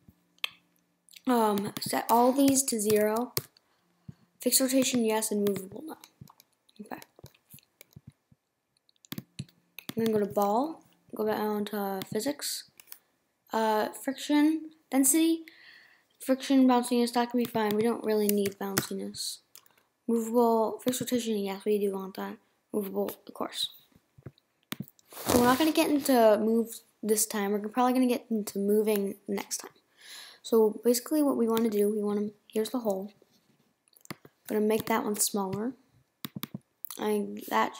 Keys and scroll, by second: 35.2 BackSpace.